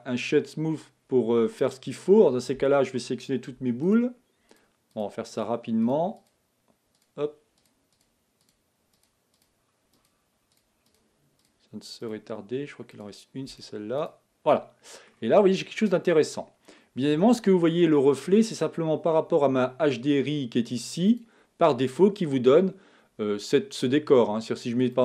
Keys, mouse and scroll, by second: 0.0-1.0 right drag, 1.0-1.6 scroll down 3, 1.6-4.2 middle drag, 4.2 shift+click, 4.9 shift+click, 5.9 shift+click, 6.3 shift+click, 7.0 shift+click, 7.9 shift+click, 9.1 shift+click, 9.4 shift+click, 10.1 shift+click, 10.9 shift+click, 12.1 shift+click, 13.0 shift+click, 14.1 right click, 14.5 middle click, 15.3-15.7 scroll up 3, 16.2 scroll down 3, 16.7-20.3 middle drag.